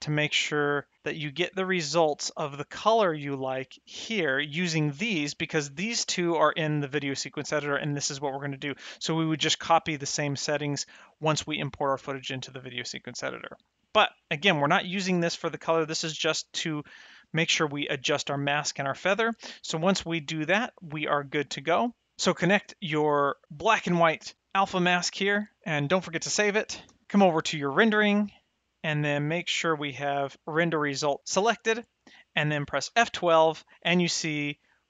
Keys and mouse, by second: 5.5 click, 10.1 click, 14.2 middle click, 16.1 click, 17.8 middle click, 20.1 middle click, 23.4 ctrl+shift+click, 26.3 ctrl+s, 27.0 s, 27.5 click, 29.6 click, 32.9 F12, 34.6 middle click.